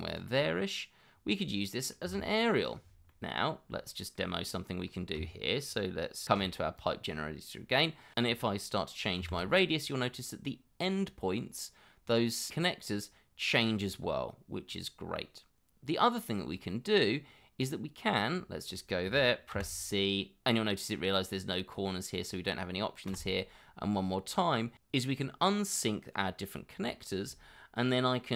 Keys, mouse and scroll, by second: 0.3 middle click, 2.0 g, 2.8 scroll down 1, 3.1 middle click, 3.7-4.1 scroll up 1, 4.1 middle click, 6.2 shift+2, 9.2 x, 19.5 c, 23.1 c.